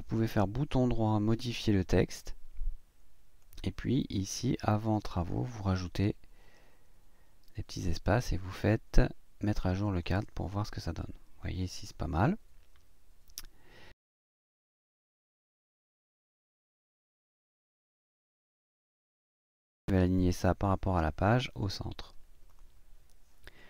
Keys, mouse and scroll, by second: 0.4 right click, 2.0 click, 3.4-4.8 drag, 6.0 space, 9.8 click, 14.6 click, 16.3-16.7 ctrl+scroll down 1, 17.6 click, 21.4 click, 22.5 click.